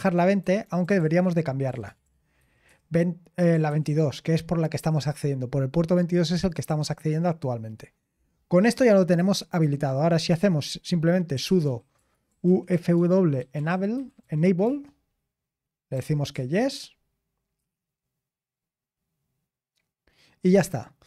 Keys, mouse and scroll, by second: 0.0-1.0 typing, 0.4 Return, 0.7 Return, 1.9 ctrl+p, 2.0 Left, 2.4 Left, 2.7 Left, 3.7 Left, 4.8 Left, 6.3 BackSpace, 8.7-10.0 scroll down 1, 10.0 typing, 11.1-16.3 typing.